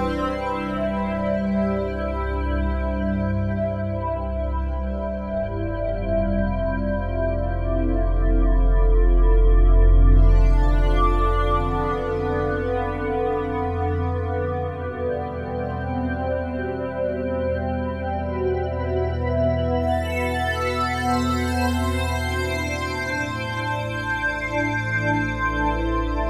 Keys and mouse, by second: 0.3-4.1 alt+drag, 7.8-9.3 alt+drag, 9.6 click, 10.6 click, 13.7-17.7 drag, 19.9 alt+click, 21.2 1, 23.9 click.